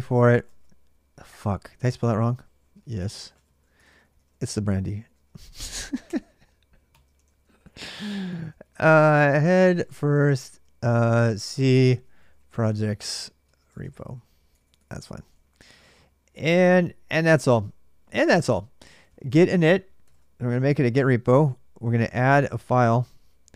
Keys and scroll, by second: 0.0-16.7 typing, 18.6-19.8 typing, 19.9 Return, 21.4-22.1 typing, 23.4-23.5 typing.